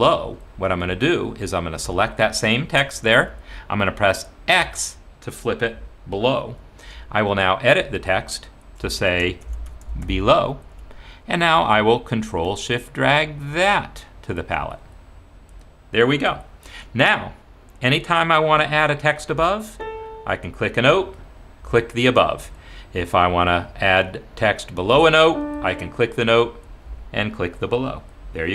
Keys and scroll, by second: 3.2 Escape, 4.6 x, 9.0 ctrl+a, 9.2-10.7 typing.